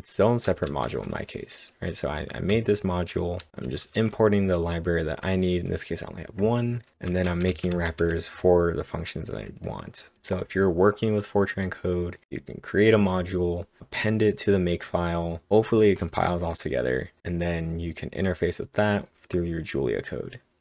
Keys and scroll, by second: 0.0-0.7 typing, 2.5-3.1 typing, 3.1 ctrl+Tab, 5.7 typing, 6.9-8.5 typing.